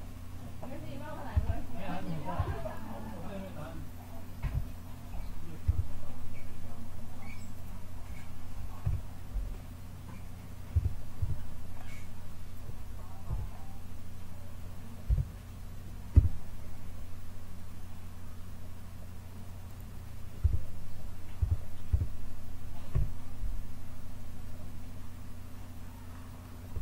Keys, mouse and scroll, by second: 1.3 a, 2.3 b, 4.3 KP_7, 5.6 s, 8.7 KP_1, 10.7 a, 11.1 b, 13.2 KP_1, 15.0 KP_7, 16.1 s, 17.7 click, 20.3 a, 21.3 a, 21.8 a, 22.8 KP_1.